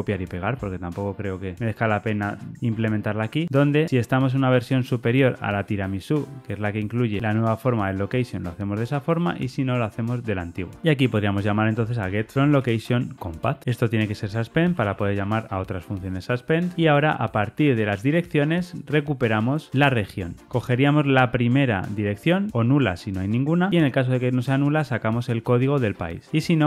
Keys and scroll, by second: 2.1 super+v, 13.3 Return, 20.4 Tab.